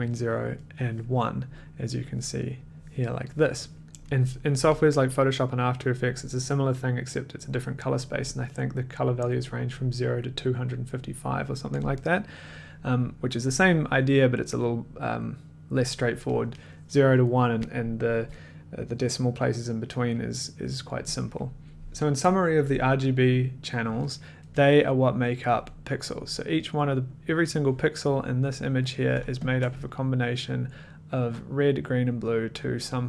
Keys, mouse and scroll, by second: 3.8-4.8 drag, 5.0 click, 21.7 click, 21.7 middle click, 21.7 1, 28.5 click, 29.4 ctrl+click.